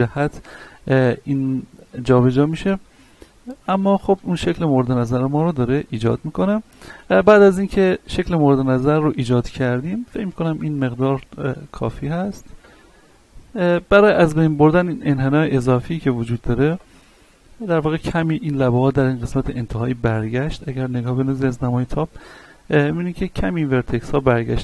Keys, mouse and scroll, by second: 0.1 scroll down 1, 0.6 middle click, 4.8-5.1 scroll down 1, 5.1-7.4 middle drag, 7.4 scroll up 1, 7.8 middle click, 9.4-10.0 scroll up 1, 11.6-13.5 drag, 13.5 middle click, 14.7 alt+right click, 15.4 alt+right click, 17.1 scroll down 1, 17.5 shift+middle click, 18.4 scroll down 1, 18.7 middle click, 19.6-20.0 scroll down 1, 20.0-21.3 middle drag, 21.3-21.7 scroll up 1, 21.8 shift+middle click, 22.2 scroll up 1, 24.3 shift+middle click.